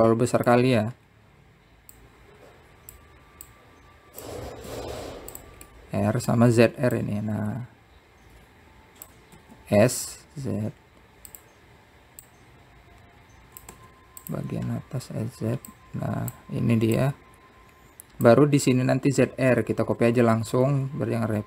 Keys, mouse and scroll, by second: 1.8-2.9 drag, 2.9-3.8 scroll up 3, 3.8 click, 5.3 click, 6.5 s, 7.5-8.8 middle drag, 8.8 click, 11.2 s, 14.0 click, 17.5 click, 18.7 click.